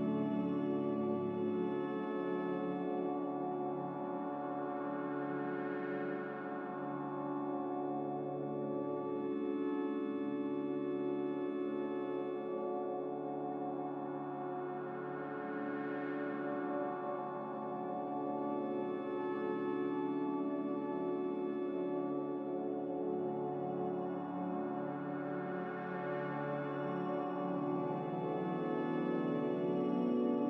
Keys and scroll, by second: 3.7 ctrl+z.